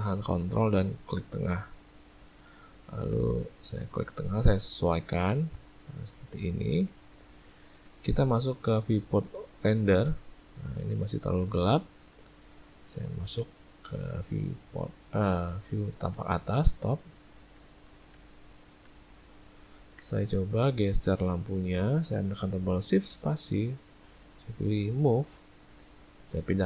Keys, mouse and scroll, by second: 1.4 ctrl+middle click, 2.3 ctrl+middle click, 2.6 middle click, 6.0 shift+middle click, 6.3 shift+middle click, 6.5 middle click, 8.1 z, 10.9 ctrl+middle click, 11.7 ctrl+middle click, 12.4 ctrl+middle click, 16.8 middle click, 17.6 ctrl+middle click, 17.8 ctrl+middle click, 18.1 `, 19.2 ctrl+middle click, 19.5 ctrl+middle click, 20.5 click, 23.1 shift+space, 26.0 click.